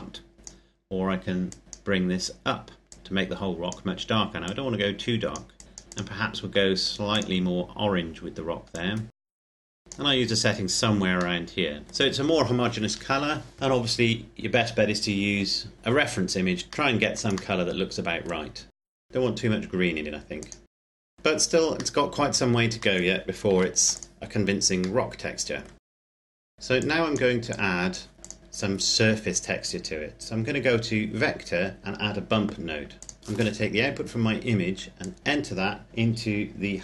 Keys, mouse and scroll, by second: 11.4 middle click, 14.0-15.7 scroll up 1, 16.5-17.4 scroll down 1, 17.4 middle click, 18.7 click, 21.1 middle click, 23.5 ctrl+s, 23.8 click, 25.0 middle click, 25.7 click, 26.0 scroll down 2, 26.1 click, 26.1 middle click, 26.4 click, 32.1 click, 34.7 click.